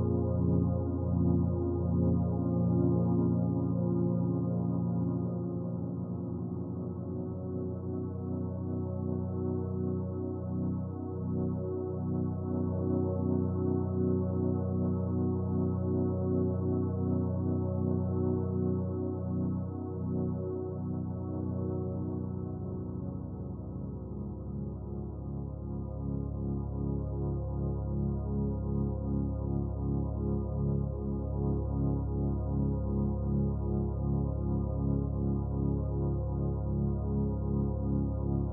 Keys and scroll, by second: 27.2 ctrl+t.